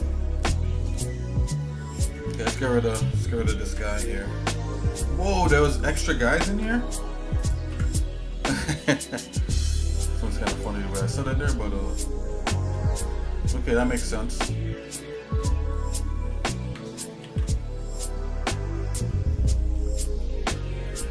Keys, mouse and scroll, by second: 0.1 shift+middle click, 0.8-1.9 shift+middle drag, 2.5 click, 3.7 Delete, 3.7 \, 5.6 click, 6.6 Delete, 7.4 click, 7.7 Delete, 9.2 shift+middle click, 10.5 click, 11.1-12.6 shift+middle drag, 12.7 shift+middle click, 13.1 shift+middle click, 13.8 shift+middle click, 14.4 shift+middle click, 15.1 middle click, 15.7 scroll down 1, 17.3 ctrl+s, 18.2 scroll up 1, 19.1 shift+middle click, 20.2 middle click, 20.8-21.1 shift+middle drag.